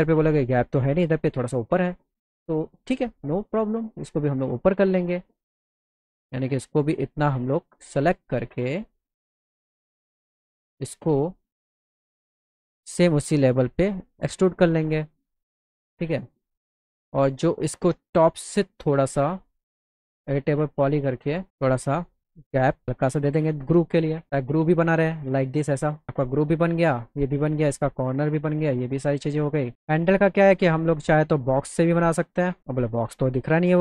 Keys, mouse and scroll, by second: 2.3 click, 3.6 click, 5.2 click, 6.1 click, 7.0 ctrl+click, 7.8 right click, 8.4 right click, 9.7 right click, 11.2 click, 12.4 click, 12.6-14.6 drag, 15.9 click, 16.5 click, 16.8 click, 19.2 click, 19.9 e, 20.8 click, 22.0-23.5 drag, 25.9 alt+middle click, 28.6 alt+middle click, 29.7 alt+middle click, 32.6-33.6 drag, 33.6 middle click.